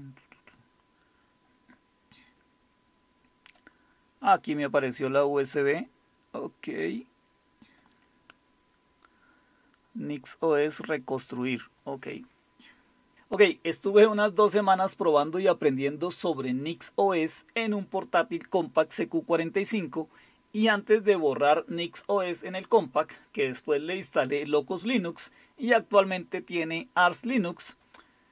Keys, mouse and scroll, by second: 4.5 click, 11.0 click, 11.2 click, 12.1 click.